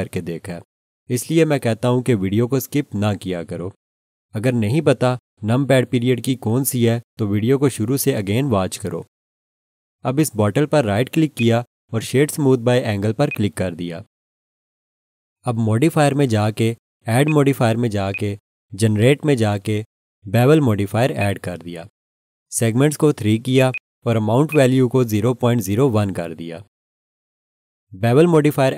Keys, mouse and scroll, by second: 11.3 right click, 13.3 right click, 13.3 click, 17.2 click, 21.2 click, 23.7 double click, 24.5 click, 25.0-26.5 typing, 26.7 Return.